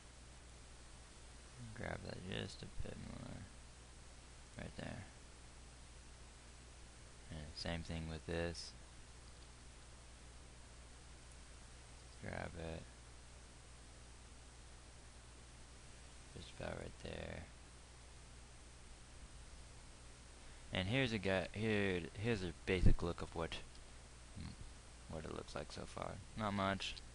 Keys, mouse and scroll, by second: 1.5 g, 9.8 g, 12.4 g, 22.0 z, 24.1 Tab.